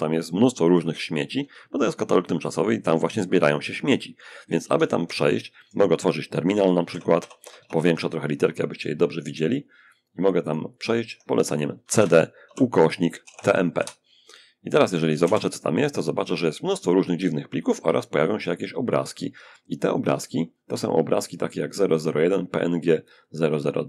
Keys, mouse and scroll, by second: 0.6 Escape, 4.0 alt+F1, 6.1 ctrl+shift+=, 6.4 ctrl+shift+=, 6.6 ctrl+shift+=, 9.1-10.8 alt+right drag, 10.0 alt+click, 11.0 alt+c, 11.1-13.0 typing, 14.0-14.9 typing, 16.8-18.4 scroll up 2, 18.9-19.9 scroll up 1, 20.7-22.3 drag, 22.4-23.8 drag.